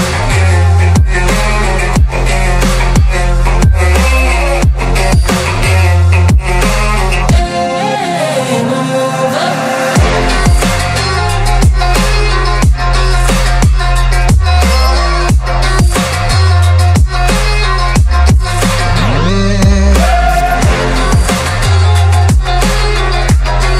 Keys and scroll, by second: 5.9 z, 6.1 KP_1, 8.6 Tab, 8.9 KP_Divide, 9.1 KP_Divide, 9.2 KP_7, 10.5 Tab, 19.8 KP_0, 22.1 Tab.